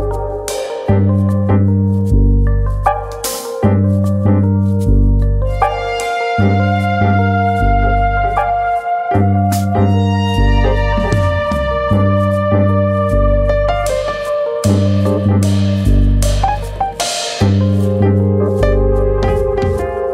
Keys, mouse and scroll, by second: 0.4-1.2 scroll down 1, 1.2 alt+click, 1.8 ctrl+e, 2.8-3.3 scroll down 4, 3.3 shift+middle click, 3.6 scroll down 1, 3.8-4.3 scroll up 3, 4.6-5.3 scroll up 1, 5.3 alt+click, 6.0 ctrl+e, 6.8-7.4 scroll down 7, 7.4 middle click, 7.8 shift+middle click, 8.1 middle click, 8.5 scroll up 2, 8.8 middle click, 9.0 shift+middle click, 9.2 middle click, 9.5 middle click, 9.7 shift+middle click, 10.3 alt+click, 10.9 shift+click, 11.2 shift+middle click, 11.8 alt+shift+click, 13.4 ctrl+e, 14.2-15.2 scroll up 5, 14.4 shift+middle click, 15.1 middle click, 15.6 scroll up 1, 16.5 alt+click, 17.4 ctrl+e, 18.3-18.8 scroll down 8, 18.8 middle click, 19.3 scroll down 1, 19.5 middle click, 19.8-20.1 scroll up 7.